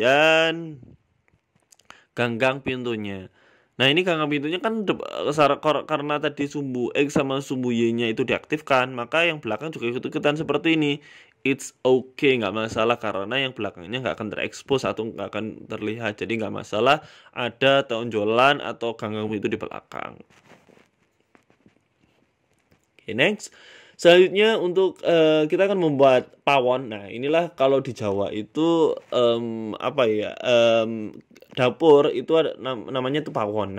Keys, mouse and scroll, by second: 0.7 g, 2.0-2.6 scroll down 3, 2.3 scroll up 5, 2.6 s, 3.5 KP_1, 4.0 scroll up 1, 4.2 s, 4.9 s, 6.0-8.8 typing, 9.9 middle click, 11.0 g, 12.4 middle click, 13.3 Tab, 13.5 middle click, 14.4 scroll down 3, 15.3 h, 15.8 ctrl+z, 16.1 g, 17.5 middle click, 18.3-18.7 scroll down 4, 18.5 middle click, 19.9 middle click, 20.8 shift+a, 23.2 shift+middle click, 23.7 s, 24.6 KP_1, 25.0-25.6 scroll up 4, 25.6 g, 27.9 s, 28.4 s, 29.3 g, 30.5 middle click, 31.1 s, 32.7 middle click, 33.2 s.